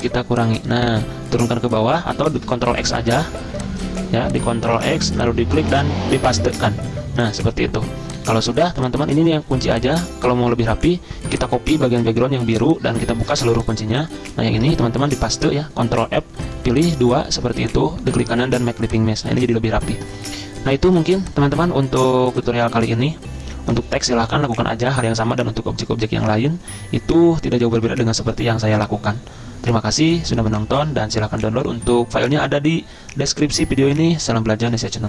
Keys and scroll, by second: 2.3 ctrl+x, 4.7 ctrl+x, 6.5 ctrl+f, 9.5 ctrl+2, 10.5 ctrl+z, 12.0 ctrl+z, 12.5 ctrl+c, 13.2 ctrl+alt+2, 14.7 ctrl+z, 15.5 ctrl+f, 17.5 ctrl+z, 19.2 z, 21.7 z.